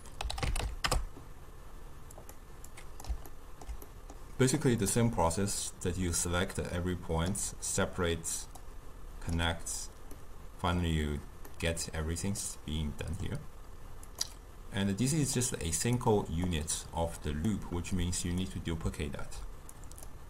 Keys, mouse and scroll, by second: 2.7-3.3 drag, 3.3-4.6 ctrl+middle drag, 4.6-6.3 drag, 8.6 click, 10.2-14.1 middle drag, 14.1-16.5 drag, 18.0 click, 19.8-20.2 drag.